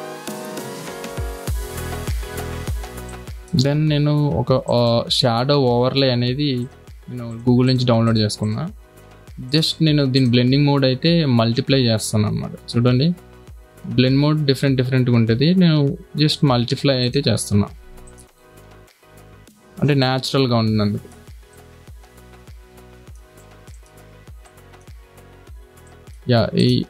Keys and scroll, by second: 19.0 ctrl+t, 24.7 space.